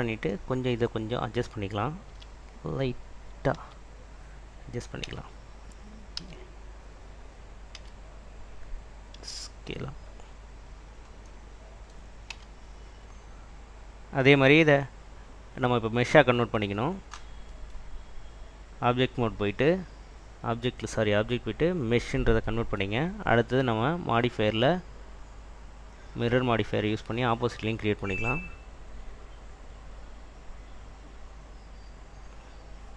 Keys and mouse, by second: 2.2 s, 3.6 Escape, 5.2 Tab, 6.5 q, 7.9 a, 10.1 click, 10.1 s, 10.9 click, 11.5 middle click, 12.6 Tab, 13.8 click, 19.6-22.0 drag, 25.8-28.0 drag, 28.8-32.9 drag.